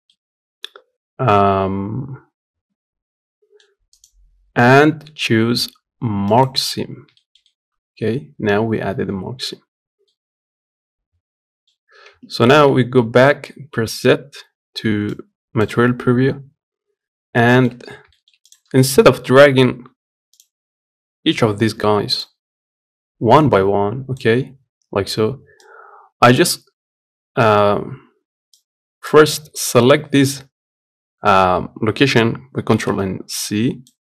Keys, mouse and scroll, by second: 6.1 right click, 6.9-9.6 shift+middle drag, 9.6 scroll down 1, 9.8-11.6 middle drag, 11.6-12.0 scroll up 1, 12.0 Tab, 15.4 z, 15.8 scroll down 1, 16.1 scroll up 1.